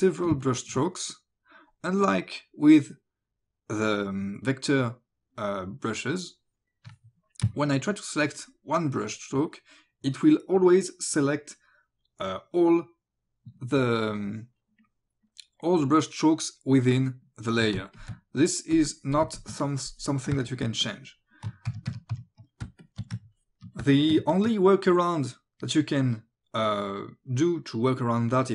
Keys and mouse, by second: 0.3 space, 0.5 click, 8.9 ctrl+click, 17.8 space, 18.0 click, 18.8 click, 19.3 space, 19.4 click, 19.6 click, 20.3 space, 20.5 click, 20.9 click, 21.7 ctrl+z, 22.7 space, 22.9 click, 23.4 ctrl+click, 23.8 space, 24.0 click, 24.3 ctrl+click.